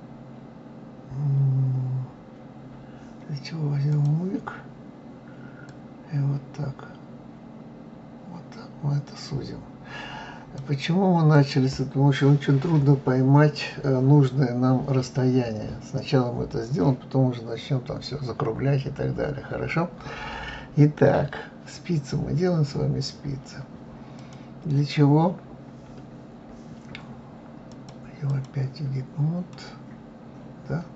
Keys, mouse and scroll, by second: 3.9 click, 5.7-8.7 drag, 11.3 click, 24.1 click, 27.7-29.5 drag, 29.5-30.9 middle drag.